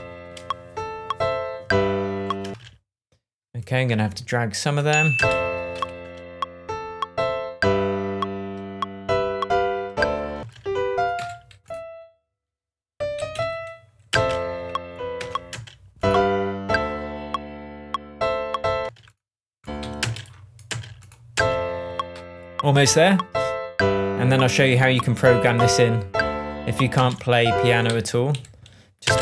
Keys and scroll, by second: 2.4 space, 5.2 super+space, 10.3 space, 11.1 Left, 13.1 Up, 14.0 space, 15.1 BackSpace, 15.5 space, 18.8 space, 19.8 Right, 20.0 alt+space, 21.1 space, 26.9 space, 27.8 Right, 29.0 space.